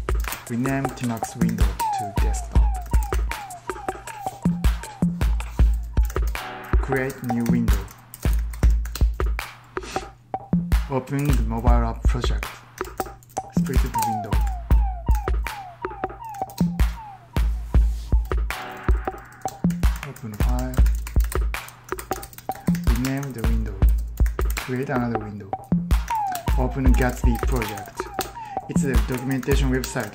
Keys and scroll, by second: 0.1 ctrl+t, 0.2-2.4 typing, 2.7 ctrl+t, 2.9 ctrl+t, 5.9 ctrl+t, 6.6-8.6 typing, 7.8 ctrl+w, 10.8-14.8 typing, 15.0 ctrl+w, 15.9-16.7 typing, 18.1-18.8 typing, 20.3 ctrl+t, 20.6 ctrl+t, 20.9 ctrl+t, 21.2 ctrl+t, 21.8 ctrl+t, 22.3 ctrl+w, 23.1 ctrl+t, 23.5-30.1 typing.